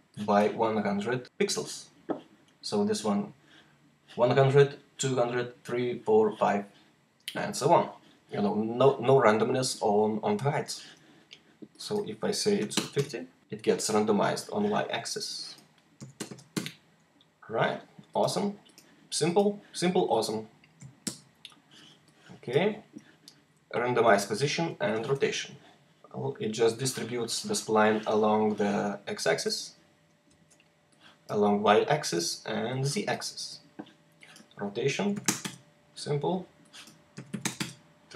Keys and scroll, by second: 12.4 typing, 12.8 Return, 15.8-16.2 typing, 16.4 Return, 19.1 typing, 20.9 F1, 30.2 z, 31.9 z, 33.2 z, 34.8 typing, 35.3 Return, 37.0 typing.